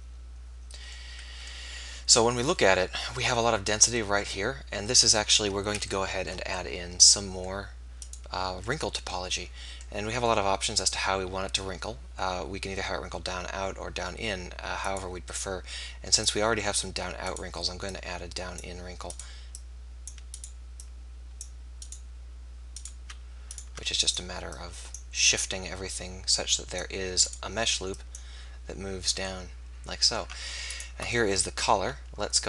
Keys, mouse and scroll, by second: 8.0-9.9 right drag, 14.8-16.6 right drag, 15.6-17.2 drag, 17.4-24.8 right drag, 17.9-24.8 drag, 27.4 click, 28.2 middle click, 29.0 click, 29.6 middle click, 30.7-32.4 right drag.